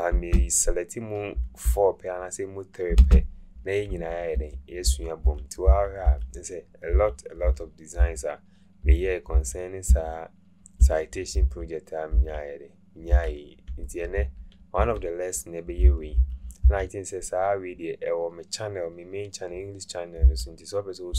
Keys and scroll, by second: 0.1 Right, 3.2 Right, 4.9 Right, 5.2 Right, 5.7 Right, 6.1 Right, 6.9 Right, 7.5 Right, 8.0 Right, 8.9 Right, 9.4 Right, 9.9 Right, 10.8 Right, 11.5 Right, 12.2 Right, 13.1 Right, 13.8 Left, 14.2 Left, 14.8 Left, 15.8 Right, 16.2 Right, 16.6 Right, 20.3 Right.